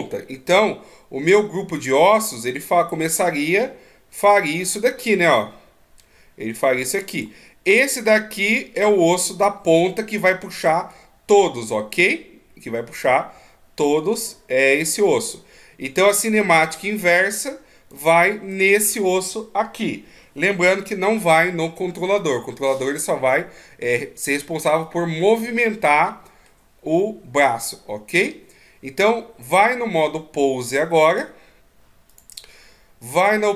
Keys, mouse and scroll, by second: 2.6 click, 2.6 d, 7.6-8.1 d, 8.1 click, 10.5-11.2 d, 11.2 right click, 18.8 right click, 25.9 middle click, 31.4 click, 32.5 click.